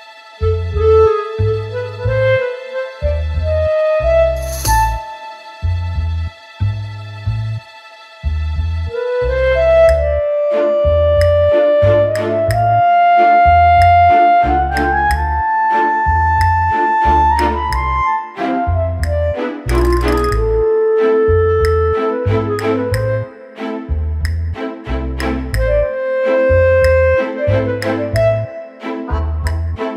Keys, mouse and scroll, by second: 0.5 shift+d, 2.2 middle click, 2.8 r, 4.9 middle click, 5.3 KP_7, 5.8 click, 6.2-6.7 scroll down 2, 6.7 scroll down 1, 6.7 s, 7.6 shift+d, 8.9 scroll down 2, 9.1 middle click, 9.8 KP_7, 10.3 click, 11.1 shift+d, 13.3 scroll down 2, 13.9 click, 13.9 scroll down 1, 14.8 typing, 18.9-19.2 scroll down 2, 19.5 click, 19.5 scroll down 3, 20.7 scroll up 2, 21.4 click, 24.5 click, 25.2 click, 26.7 click, 29.4 click.